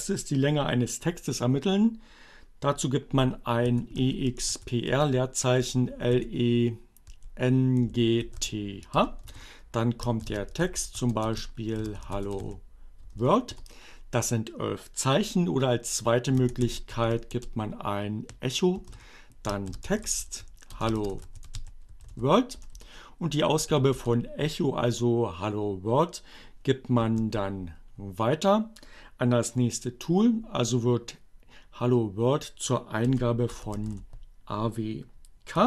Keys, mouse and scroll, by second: 2.2-3.1 typing, 4.5 r, 4.9 space, 5.2 l, 5.8 e, 7.2 n, 8.1 h, 8.3 space, 9.9-12.9 typing, 15.0-15.9 typing, 17.2 o, 17.4 space, 19.2-23.0 typing, 25.6 alt+<, 33.1-34.4 typing.